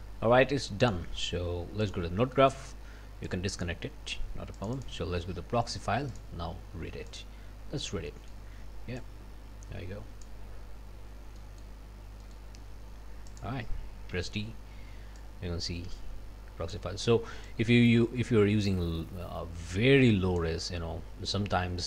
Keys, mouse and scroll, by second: 0.9 click, 1.8 click, 2.3 click, 3.3 click, 4.6 click, 6.1 click, 7.1 click, 8.1 click, 9.0-10.4 drag, 10.9 scroll down 1, 11.4 click, 11.9 scroll up 1, 12.2 click, 13.3 click, 14.1 d, 15.2-16.9 drag, 17.5-20.6 drag.